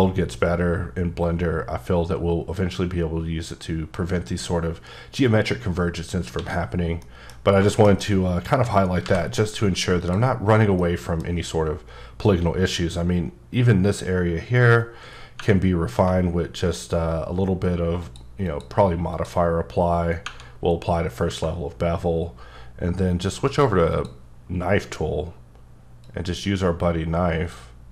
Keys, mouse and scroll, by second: 0.9 scroll down 2, 5.6-6.2 scroll down 5, 6.4 alt+a, 7.0 middle click, 7.3 scroll down 2, 7.7 shift+middle click, 8.1 middle click, 9.0 v, 10.0 click, 10.5-10.8 scroll down 1, 10.8 middle click, 11.3-11.8 scroll up 2, 12.1-14.2 scroll up 1, 14.2 scroll up 1, 15.1 scroll down 2, 16.7-17.2 scroll up 1, 18.0 click, 18.5 click, 19.1 click, 23.5 click, 23.9 click, 26.0-27.5 drag.